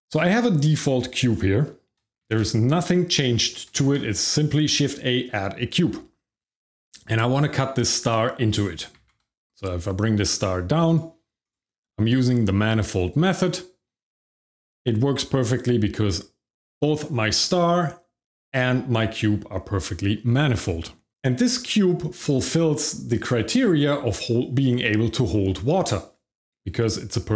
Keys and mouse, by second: 1.2 click, 2.2 shift+z, 3.8 shift+z, 7.3 click, 8.9 g, 9.1 z, 10.8 click, 11.4 click.